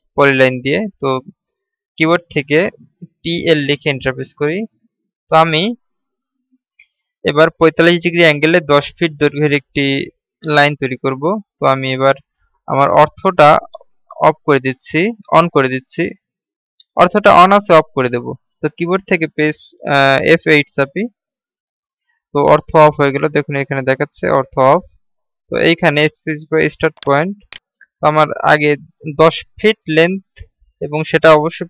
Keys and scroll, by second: 3.5-4.2 typing, 22.2 F8.